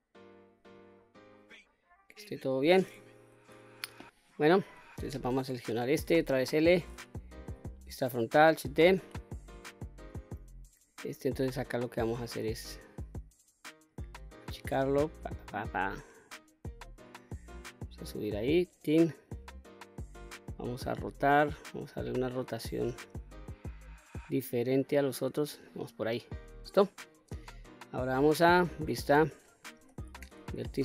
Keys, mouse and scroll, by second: 4.3 3, 4.7 click, 5.9 l, 7.0 KP_1, 8.2 shift+d, 10.0 click, 11.4-13.5 drag, 15.1-16.4 drag, 17.2-18.8 drag, 19.9-25.1 drag, 26.5 click, 28.1 q, 29.3 1, 30.1 click.